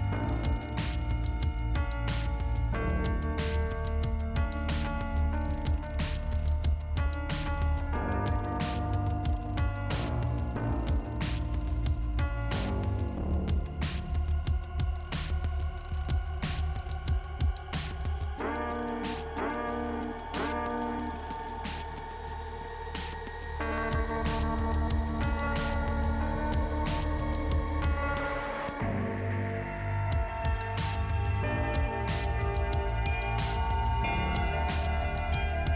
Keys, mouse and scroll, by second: 3.5 m, 4.6 click, 4.7 click, 4.9 m, 6.3 click, 7.1 right click, 7.9 click, 10.0 click, 10.1 click, 11.0 p, 13.2 click, 14.9 click, 17.8 click, 20.4 click, 22.0 click, 22.1 click, 23.0 click, 23.1 click, 25.8 click, 28.6 click, 28.8 click, 30.9 click, 31.1 click, 34.4 click, 34.4 click, 35.1 click, 35.2 click.